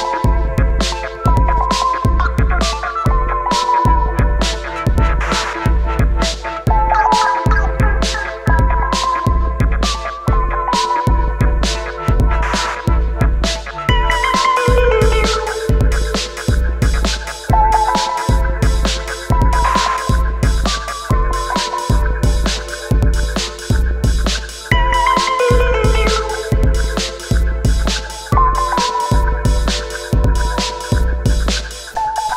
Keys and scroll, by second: 20.3 ctrl+d, 20.6 ctrl+d, 20.8 ctrl+d, 21.2 ctrl+d, 21.7 ctrl+d, 21.9 ctrl+d.